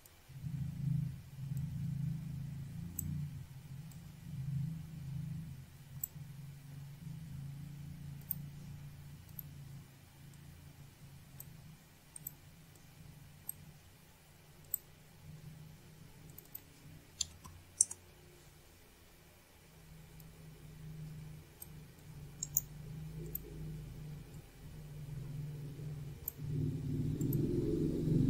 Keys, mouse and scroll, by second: 0.0 click, 0.9 click, 2.0 click, 4.4 click, 4.8 click, 4.9 double click, 6.3 click, 8.2 scroll up 1, 12.6 click, 13.7 click, 14.7 click, 16.4 click, 18.8 click, 24.1 click, 25.8 click, 26.5 right click, 27.0 click, 27.1 click, 28.0 click.